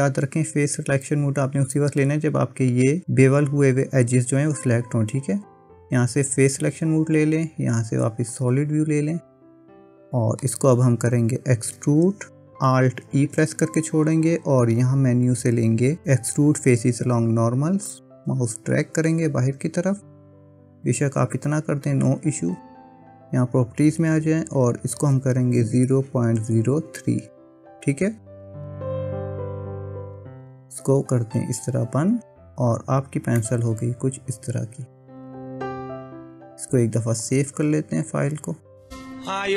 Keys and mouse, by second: 8.4 click, 9.9 middle click, 13.2 alt+e, 23.4 click, 24.6-28.8 drag, 30.7 click, 32.2 Tab, 33.4-35.5 middle drag, 37.4 click.